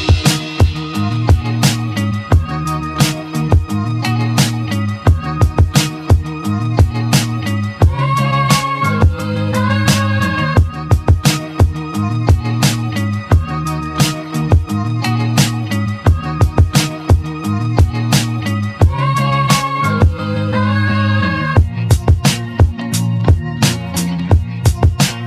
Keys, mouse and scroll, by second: 1.1 scroll up 1, 1.6-3.7 shift+middle drag, 3.7 3, 4.1 click, 4.9 click, 5.5 click, 6.2 middle click, 9.2 e, 13.4-15.9 middle drag, 17.8 shift+middle click, 18.4 1, 19.0 click, 20.1 g, 23.7-25.2 middle drag.